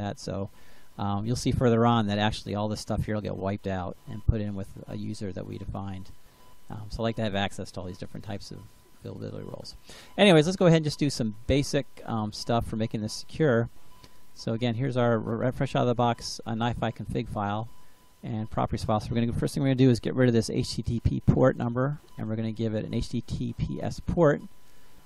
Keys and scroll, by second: 21.3 BackSpace.